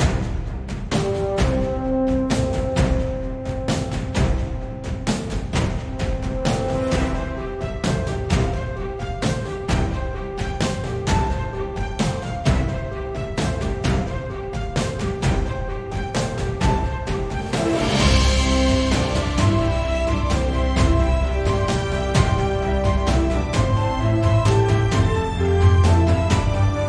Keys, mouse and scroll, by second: 1.2 `, 1.8 click, 2.2 Tab, 2.8 z, 3.6 shift+click, 4.0 g, 6.6 Escape, 7.1 o, 22.5 click, 23.7 o, 24.7 scroll up 1, 25.0 g.